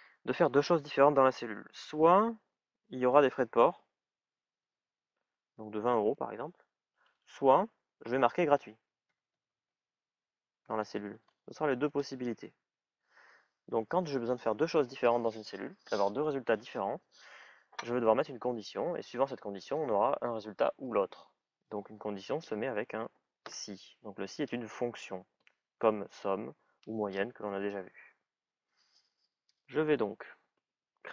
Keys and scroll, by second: 4.5 shift+é, 6.8 BackSpace, 8.1-10.5 typing.